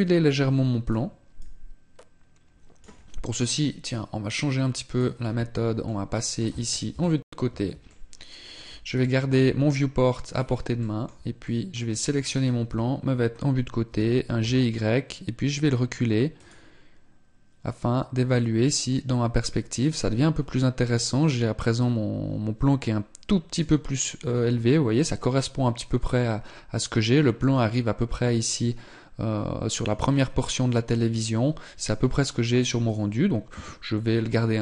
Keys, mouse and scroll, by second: 0.6 click, 5.8 middle click, 6.9 KP_3, 7.7 shift+middle click, 10.1-10.5 scroll down 4, 10.7 shift+middle click, 11.3 middle click, 11.7 right click, 12.5 KP_3, 13.7 g.